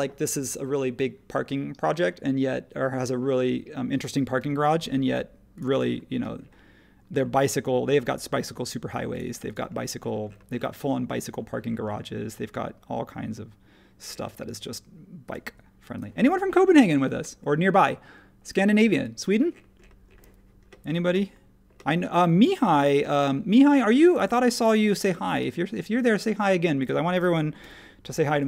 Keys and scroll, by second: 4.3 i, 15.4 Escape, 18.8 e, 22.3 super+z, 23.0 space, 27.6 |.